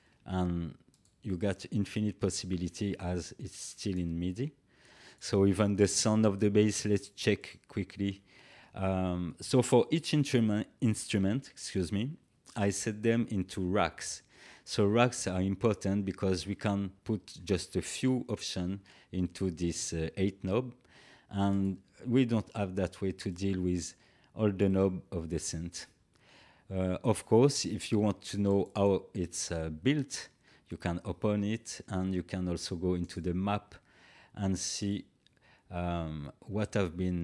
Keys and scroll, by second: 2.6 Delete.